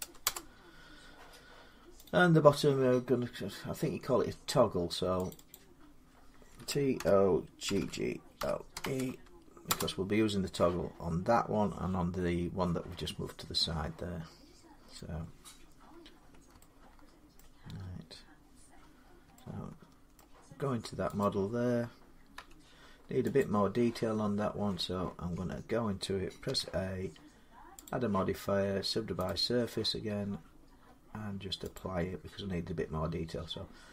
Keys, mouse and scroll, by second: 0.1 Return, 1.9 click, 5.1 click, 5.3 click, 6.4-8.6 typing, 9.5 Return, 11.9 middle click, 12.1 middle click, 14.1 middle click, 14.2 middle click, 17.1 scroll, 17.2 middle click, 19.1 Tab, 19.2 scroll, 19.6-19.9 Tab, 20.0 middle click, 21.0 click, 22.2 Tab, 23.2 click, 24.4 Tab, 25.1 Tab, 26.3 a, 27.7 click, 29.1 click, 30.3 typing, 31.6 click.